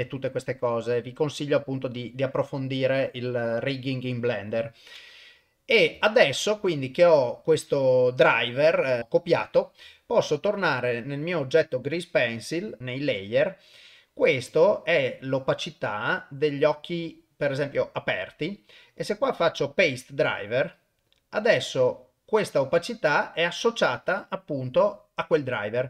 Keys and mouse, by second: 3.2 click, 6.0-6.4 shift+middle drag, 9.8 ctrl+Tab, 10.6 click, 18.9 right click.